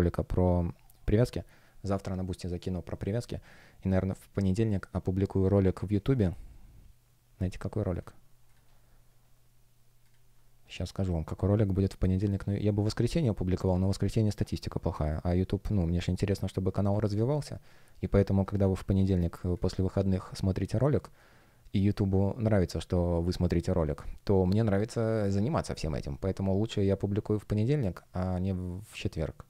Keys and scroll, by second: 15.1 space, 18.4 super+\, 19.1 space.